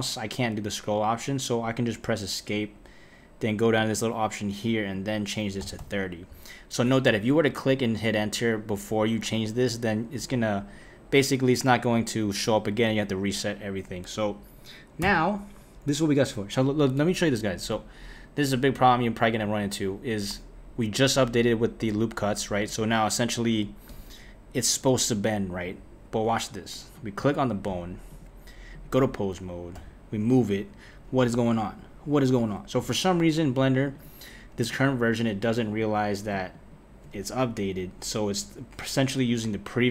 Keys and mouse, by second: 3.8-8.0 drag, 11.3 click, 15.0 Tab, 17.7 click, 19.4 click, 23.9 Tab, 25.6 Tab, 26.9 click, 28.1-29.7 drag, 29.7 g, 33.9-35.8 drag, 36.5 shift+click.